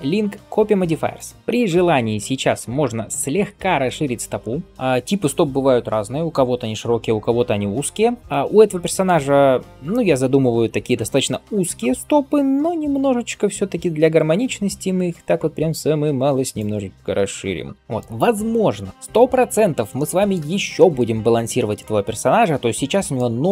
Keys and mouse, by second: 3.3 shift+click, 3.6-23.5 shift+middle drag, 11.8 s.